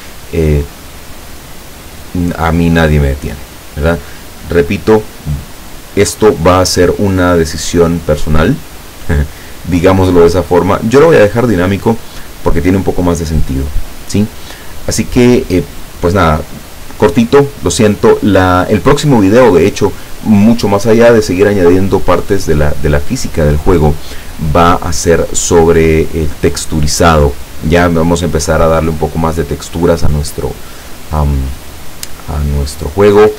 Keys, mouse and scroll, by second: 8.4 click, 10.5 click.